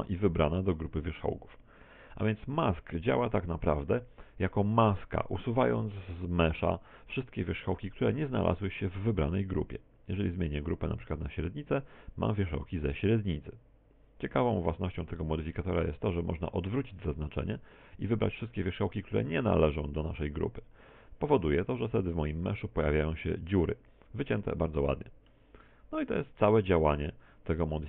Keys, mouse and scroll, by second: 4.5 middle click, 5.7 middle click, 7.4 middle click, 10.2 click, 14.7 middle click, 15.6 middle click, 20.0 click, 21.8 middle click, 26.4 click.